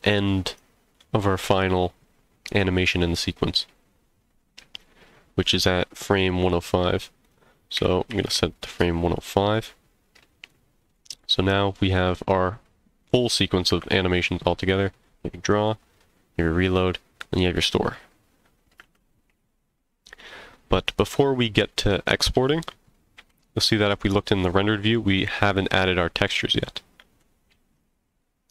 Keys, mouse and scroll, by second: 0.5 click, 7.2-9.4 drag, 10.5-10.9 drag, 11.2 middle click, 12.7 click, 13.7 space, 18.8 space, 21.7-22.2 middle drag, 22.3 z, 23.9-24.9 middle drag, 25.8-26.2 middle drag, 26.6 z.